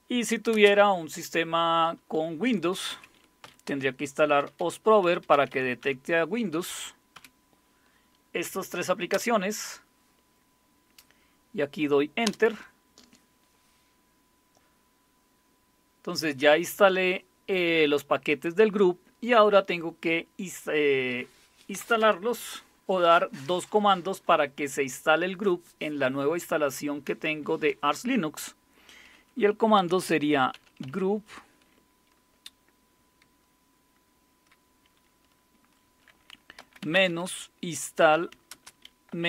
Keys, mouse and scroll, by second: 0.5 typing, 2.9-7.1 typing, 8.9-9.6 typing, 12.3 Return, 29.5-31.3 typing, 36.8-39.2 typing.